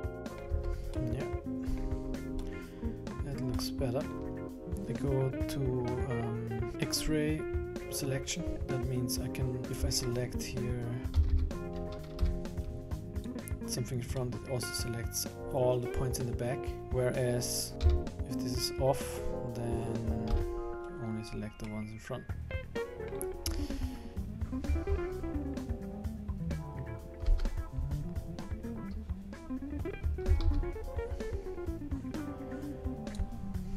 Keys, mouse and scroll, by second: 0.0 Tab, 0.1 click, 0.2 middle click, 0.6 Tab, 1.0 middle click, 2.2 scroll up 2, 2.4 middle click, 3.2-3.5 scroll down 3, 3.5 middle click, 4.3 click, 4.3 KP_1, 11.1 a, 11.4 a, 12.2 b, 14.2 middle click, 17.8 a, 18.1-18.5 scroll down 3, 18.1 a, 18.1 KP_1, 18.5 click, 20.2 b, 21.7 middle click, 27.2 KP_1, 30.3 a, 30.4 a, 33.1 click.